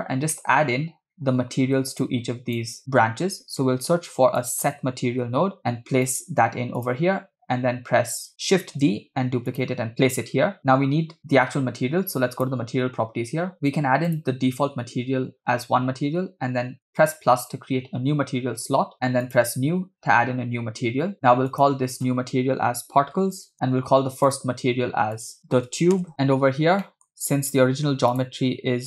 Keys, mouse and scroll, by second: 0.0 scroll down 2, 0.3 middle click, 2.0-2.6 drag, 3.8 shift+a, 8.9 shift+d, 10.9 scroll up 3, 12.4 click, 13.5-15.4 drag, 19.3-20.8 drag, 21.5-23.5 drag, 23.5 scroll up 1, 24.3 click, 25.1 click, 26.1 middle click, 26.8 middle click, 27.1-27.8 scroll down 3, 28.1 click.